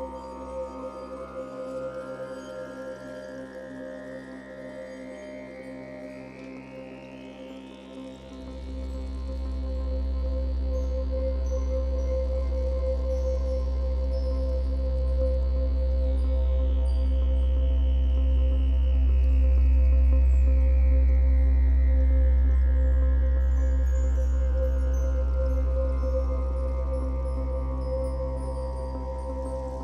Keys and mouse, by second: 2.8-5.1 drag, 5.1 g, 5.9-7.4 drag, 7.7-9.1 alt+shift+drag, 7.7 typing, 9.1 x, 9.3-9.7 ctrl+alt+drag, 13.6 click, 16.5 alt+shift+click, 18.0 alt+shift+click, 18.9-20.9 typing, 21.2 Return, 23.0 click, 23.0 typing, 23.8-25.8 drag, 26.2-29.8 drag.